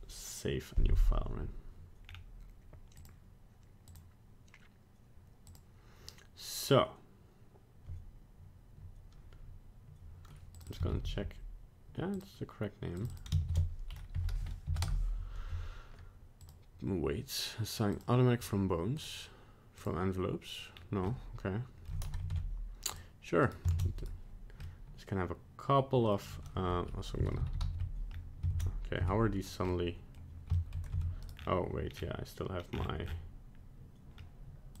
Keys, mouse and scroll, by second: 2.1 scroll down 2, 3.0 click, 3.9 click, 5.5 click, 10.6 click, 10.7 click, 13.0 click, 13.1 click, 16.4 click, 19.0 click, 20.7 scroll down 1, 21.1 middle click, 22.2 ctrl+Tab, 22.3 ctrl+Tab, 23.4 right click, 23.7 ctrl+Tab, 24.0 right click, 24.6 middle click, 26.6 a, 27.3 alt+r, 27.4 alt+g, 27.6 alt+s, 28.1 scroll up 1, 28.5 ctrl+Tab, 29.0 Tab, 29.5 right click, 29.7 middle click, 30.6 shift+middle click, 31.0 Tab, 31.2 right click, 31.4-32.5 scroll down 6, 32.7-34.2 scroll down 11, 34.2-34.8 scroll up 1.